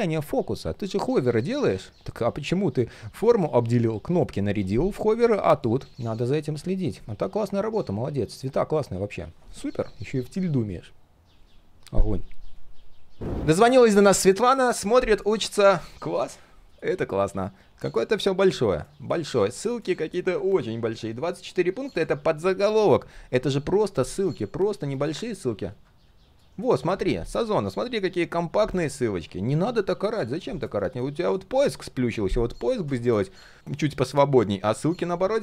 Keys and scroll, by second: 16.3 ctrl+\, 20.4 ctrl+\, 22.8 ctrl+\, 25.7 ctrl+v, 33.3 ctrl+v.